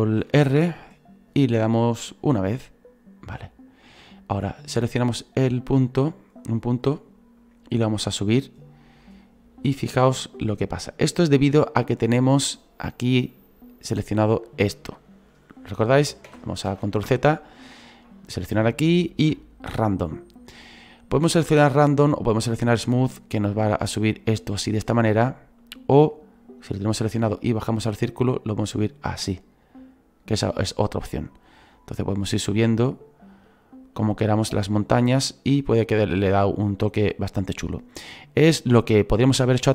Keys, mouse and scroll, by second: 2.1 ctrl+r, 4.4 click, 5.5-7.4 right drag, 7.4-16.2 drag, 16.2 ctrl+z, 16.6 ctrl+z, 17.5 click, 18.2 click, 23.3-24.9 drag, 24.9 ctrl+z, 25.6-30.8 drag, 31.7 right click, 34.8 right click, 36.4 right click, 38.2 right click.